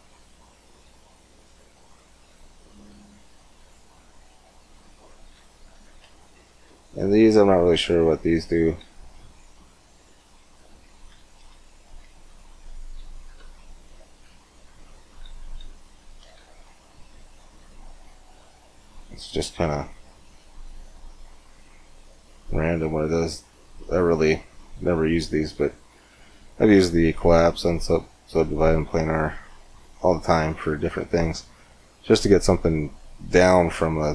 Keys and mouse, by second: 4.2-5.5 drag, 5.7 ctrl+z, 9.7 click, 10.2 click, 11.2 ctrl+z, 12.4 click, 13.2 Tab, 14.0 Tab, 15.2 ctrl+z, 16.2 ctrl+z, 22.8-29.7 drag, 29.7-31.0 middle drag, 31.4 middle click, 32.9-34.1 middle drag.